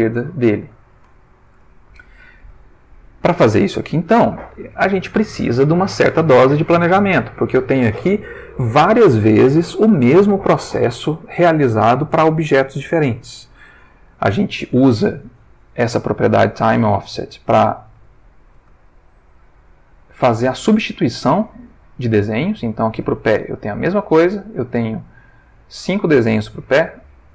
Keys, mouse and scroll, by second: 1.0 Tab, 1.7-2.6 ctrl+middle drag, 2.7-3.4 ctrl+shift+middle drag, 3.5-4.2 ctrl+shift+middle drag, 18.2-19.3 ctrl+middle drag, 19.6 shift+click, 23.8-27.3 drag.